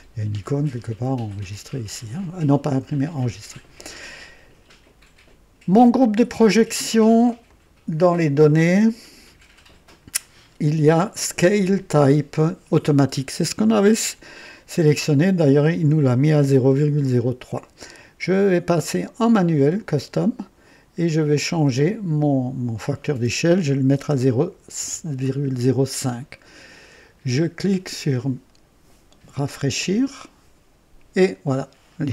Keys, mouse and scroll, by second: 5.7 click, 7.4 click, 18.2 click, 18.8 click, 19.8 click, 21.0 click, 21.7 click, 23.9 BackSpace, 24.7 KP_5, 29.7 click.